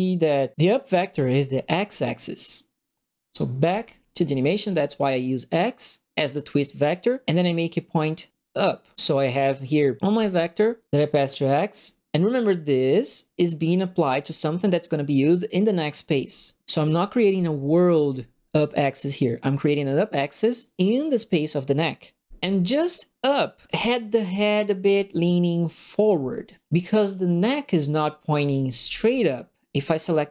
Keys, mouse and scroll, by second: 3.6 click, 8.3 right click, 12.9 click, 13.9 click, 17.2 click, 23.3 click, 23.7 click, 27.0 click, 28.0 click, 28.1 right click, 28.1-29.5 typing, 29.1 middle click, 29.1 right click, 30.0 click.